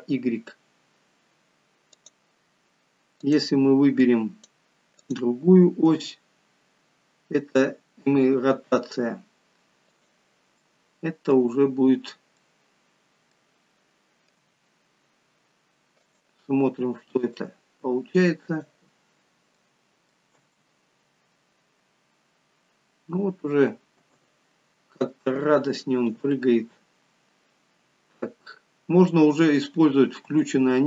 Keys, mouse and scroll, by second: 3.1 click, 4.1 click, 6.0 g, 10.6 middle click, 11.5 scroll down 3, 12.4 middle click, 12.4 scroll down 2, 14.3 g, 17.5 click, 19.0 scroll down 3, 19.6 middle click, 20.3 space, 24.0 space, 25.4 click, 30.4 space.